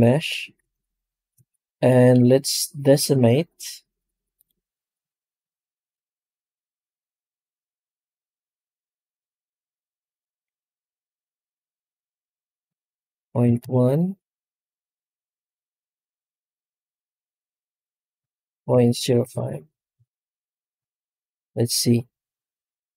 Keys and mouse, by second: 2.2-4.7 drag, 13.4 click, 19.2 click.